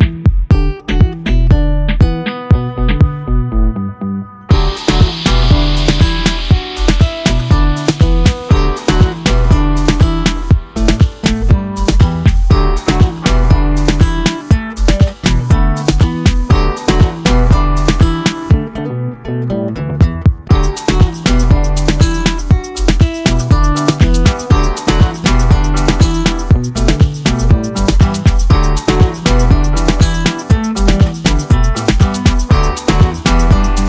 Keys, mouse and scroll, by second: 1.3 middle click, 1.9 click, 2.7-3.4 drag, 3.5-4.6 drag, 5.5-11.2 drag, 11.6-13.9 drag, 14.8 ctrl+s, 15.8-16.8 shift+middle drag, 16.9 scroll down 3, 17.2 click, 17.5 KP_Decimal, 17.9-18.4 middle drag, 18.4 scroll down 2, 18.6-19.6 shift+middle drag, 21.5-22.8 drag, 26.7 shift+a, 28.3-29.4 drag, 31.6 drag, 33.0 click.